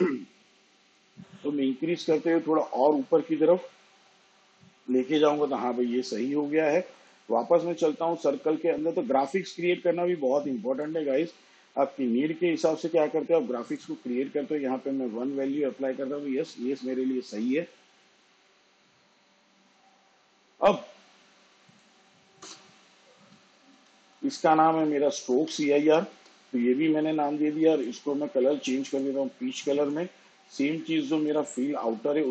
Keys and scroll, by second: 15.9 1, 24.1 Return, 24.8-28.0 typing.